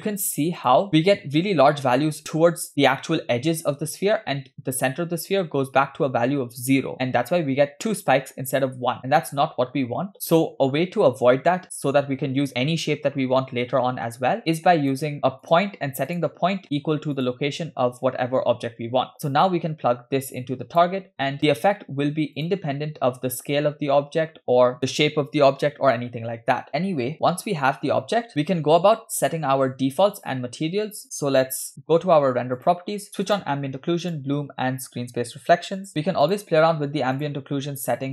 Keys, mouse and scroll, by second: 0.9 shift+middle click, 6.9-7.5 scroll down 4, 9.0-9.7 scroll up 5, 14.9 click, 15.2 middle click, 15.5 click, 16.1 click, 16.6 middle click, 17.2 click, 19.5 click, 19.9-21.0 drag, 22.4 click, 23.3 s, 28.3 shift+middle click, 28.3 scroll down 3, 28.5-29.0 scroll up 2, 29.0-29.6 shift+middle drag, 32.6 click, 33.3 click, 34.1 click, 35.9 click, 36.3 click, 37.2 click.